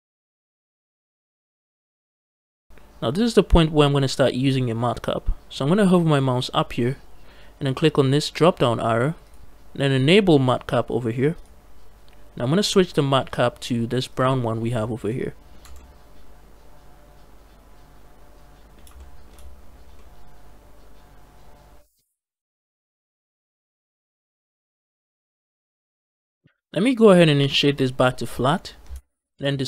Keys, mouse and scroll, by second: 1.1 shift+middle click, 1.5 middle click, 1.8 scroll up 1, 9.1-14.2 drag, 14.7 scroll down 2, 14.9 middle click, 15.5 Tab, 15.6-18.6 middle drag, 18.8 shift+middle click, 19.4-19.8 scroll up 2, 19.8-26.4 middle drag, 26.4-28.2 right drag, 29.2 ctrl+space.